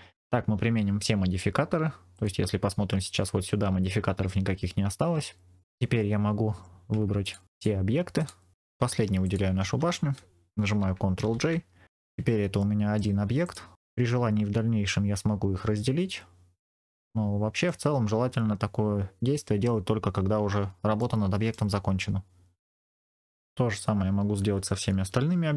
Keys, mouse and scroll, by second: 2.0 click, 5.4 scroll down 1, 5.6 middle click, 5.9-7.0 scroll up 1, 7.1 click, 7.4 shift+click, 8.1 shift+click, 9.1 shift+click, 11.1 ctrl+j, 11.9-12.5 scroll down 2, 12.5 middle click, 13.3 click, 14.0-17.7 middle drag, 19.8-20.9 scroll down 2, 20.9 middle click, 22.0-22.7 scroll up 2, 23.4-24.3 scroll down 1.